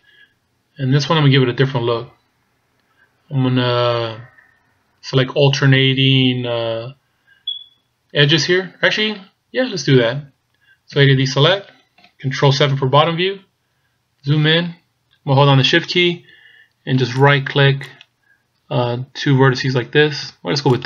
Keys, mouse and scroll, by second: 1.8 scroll down 1, 8.7-11.0 scroll down 1, 11.0 scroll down 2, 11.0 a, 12.8 ctrl+KP_7, 13.6-14.2 scroll up 4, 17.3 shift+right click, 18.0 shift+right click.